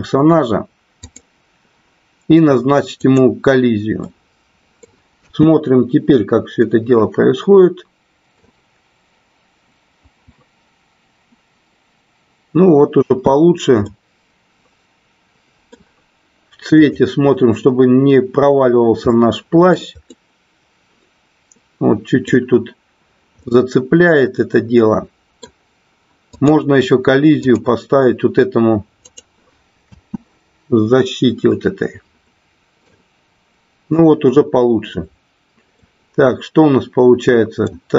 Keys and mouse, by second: 1.0 click, 2.9 click, 4.0 middle click, 5.2 space, 7.0-9.1 middle drag, 13.1 space, 13.7-15.7 middle drag, 18.2-20.0 drag, 20.1-22.3 middle drag, 23.4-25.4 middle drag, 27.4 click, 29.9 space, 31.9-34.3 middle drag, 36.3-37.9 middle drag.